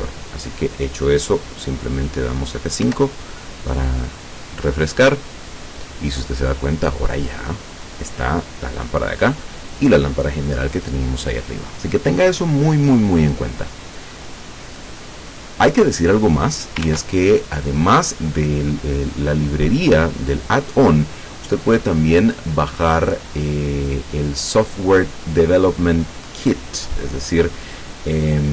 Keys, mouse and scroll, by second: 2.9 F5, 16.9 ctrl+Tab, 23.2-23.8 scroll down 2, 26.8-27.2 scroll down 2.